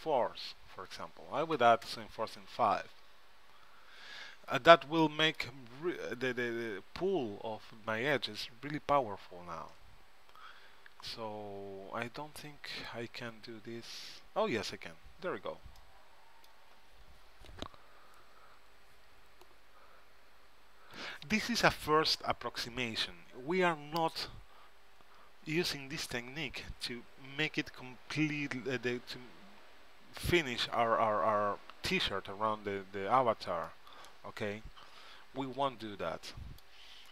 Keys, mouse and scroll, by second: 5.1-6.9 middle drag, 10.6-12.6 middle drag, 12.9-15.0 drag, 17.4-19.1 middle drag, 34.8-36.3 middle drag.